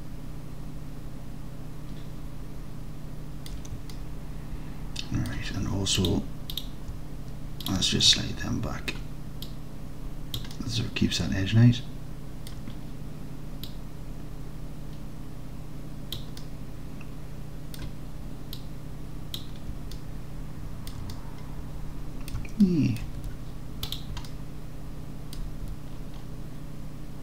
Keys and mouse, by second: 2.7 alt+click, 2.9 alt+click, 4.0-5.3 alt+drag, 6.0 click, 8.1 alt+click, 9.6 click, 10.6 alt+click, 11.4-12.5 alt+drag, 13.7-16.2 drag, 16.5-17.8 alt+drag, 18.7 middle click, 20.0-20.9 alt+drag, 21.2-22.4 drag, 22.7 alt+click, 22.9 alt+middle drag, 23.3 Tab, 24.3 alt+middle click, 24.9 alt+middle click, 24.9-25.4 alt+drag, 25.7 Tab.